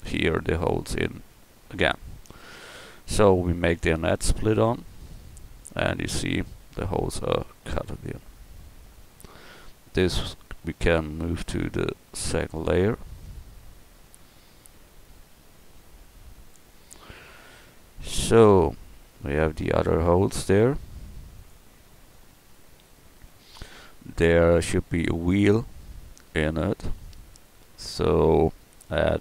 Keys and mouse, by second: 11.2 m, 14.3 KP_1, 27.0-28.8 drag.